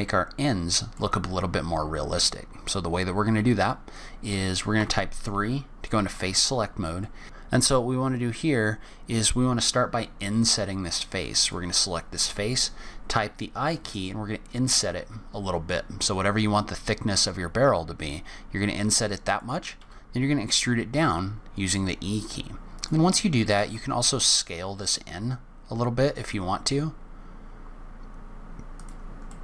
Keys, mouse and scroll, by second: 0.3 middle click, 1.1-2.0 scroll up 2, 3.6-4.8 scroll up 3, 3.9 middle click, 4.8 3, 5.8 click, 6.5-7.0 scroll up 3, 7.0 middle click, 11.4 click, 12.2 i, 19.8 e, 23.6 s, 29.2 middle click.